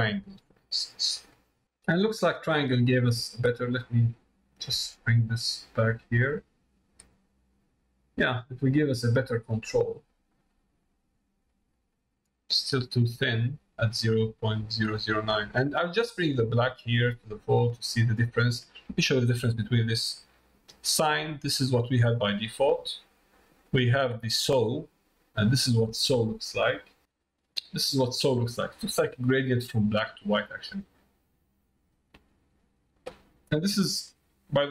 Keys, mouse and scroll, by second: 4.6-9.6 drag, 11.7 middle click, 16.0-18.2 drag, 20.2 click, 22.6 middle click, 23.7-24.8 drag, 27.8 middle click, 28.8 middle click, 32.6-34.7 drag.